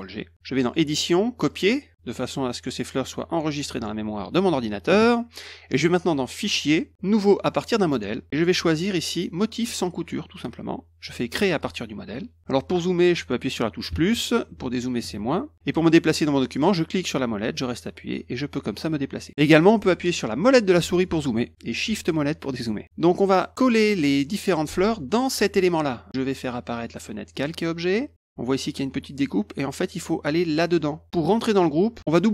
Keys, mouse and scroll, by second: 0.7 click, 1.5 click, 6.4 click, 7.7 click, 8.4 middle click, 8.4 scroll down 1, 9.8 click, 11.6 click, 17.0-19.3 middle drag, 20.4 middle click, 21.0 middle click, 22.1 shift+middle click, 22.3-22.7 shift+scroll down 1, 22.8 middle click, 27.3 click, 28.1 click.